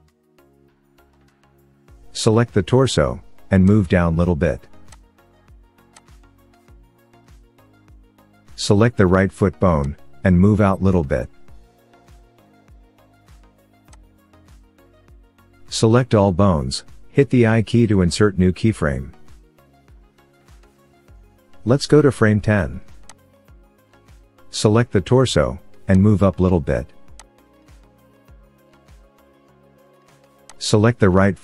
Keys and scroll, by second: 11.2 g, 16.5 a, 18.6 i.